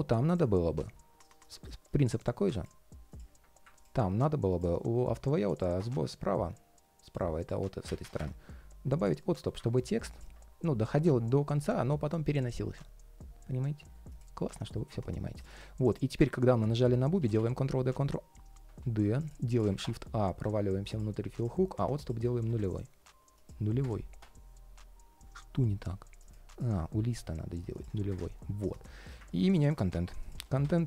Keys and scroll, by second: 9.1 ctrl+shift+3, 9.4 ctrl+shift+3, 14.2 ctrl+shift+3, 15.1 ctrl+shift+3, 16.9 super+d, 29.6 super+c, 30.1 super+a.